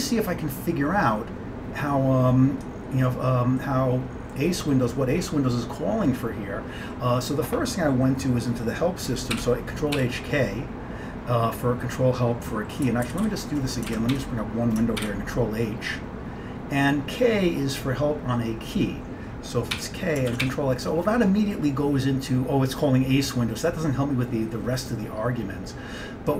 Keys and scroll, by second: 9.4 ctrl+h, 10.1 k, 13.1 ctrl+g, 13.3 ctrl+g, 14.0 ctrl+x, 14.2 1, 15.1 ctrl+h, 19.8 k, 20.4 ctrl+x, 20.5 o.